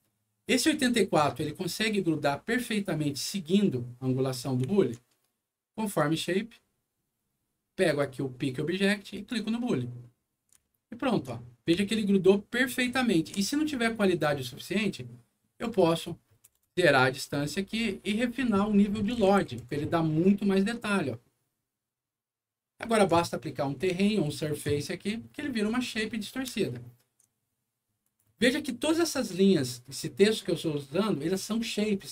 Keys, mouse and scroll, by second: 0.0-1.0 alt+middle drag, 1.4 alt+middle click, 4.6 alt+middle click, 5.8 alt+click, 7.8 alt+click, 9.1 click, 10.6 alt+middle click, 11.4 alt+scroll up 2, 11.5-13.2 alt+middle drag, 13.7 alt+scroll up 1, 14.0 alt+middle click, 15.7 alt+click, 15.9 alt+click, 16.4 KP_0, 16.7 Return, 18.1 click, 18.3 click, 19.1 KP_0, 19.5 5, 19.7 Return, 20.9-22.9 alt+middle drag, 24.0 alt+middle click, 25.0 alt+middle click, 25.7 alt+middle click, 26.1 scroll down 2, 26.5 alt+middle click, 28.0 alt+click.